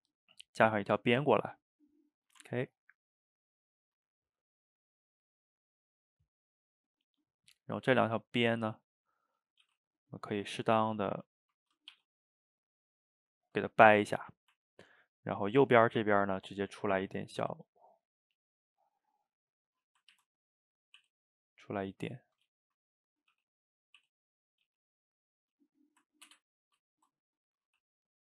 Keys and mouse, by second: 2.4 Tab, 2.6-3.4 middle drag, 3.4 click, 4.2 drag, 4.9 shift+click, 5.7 shift+click, 7.2 drag, 7.7 shift+click, 8.4 click, 9.0-9.6 middle drag, 9.6 g, 10.9 click, 11.2 middle click, 12.0 g, 13.1-16.2 middle drag, 16.2 click, 16.3-17.4 middle drag, 17.4 e, 18.5-20.2 middle drag, 20.2 ctrl+z, 21.0 e, 21.8-23.4 middle drag, 23.4 g, 26.2 ctrl+KP_Add, 27.7 g.